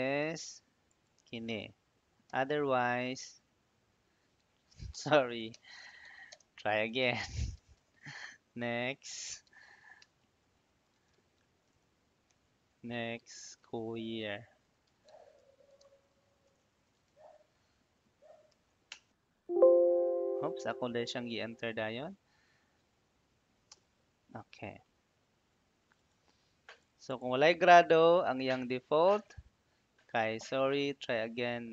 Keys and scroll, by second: 2.1 ', 4.5-18.4 typing, 18.8 Return, 23.6 Return.